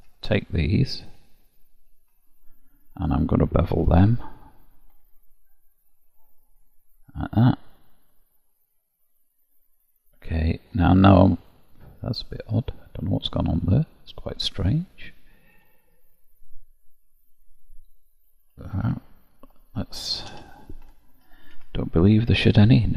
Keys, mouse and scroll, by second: 0.6 ctrl+click, 0.9 ctrl+click, 1.5 shift+click, 2.4 ctrl+click, 3.8 ctrl+b, 7.1 middle click, 11.0 click, 11.5 middle click, 18.6 ctrl+z, 18.9 ctrl+z, 20.3 a, 21.3 m.